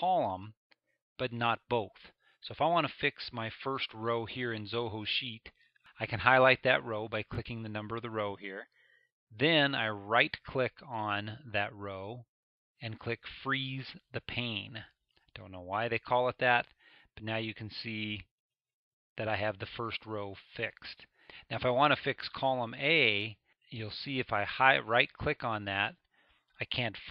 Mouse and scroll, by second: 18.2 middle click, 18.2 scroll, 19.0-19.6 scroll down 2, 19.6-24.5 middle drag, 19.6 scroll, 26.1-27.1 middle drag, 26.1-27.1 scroll.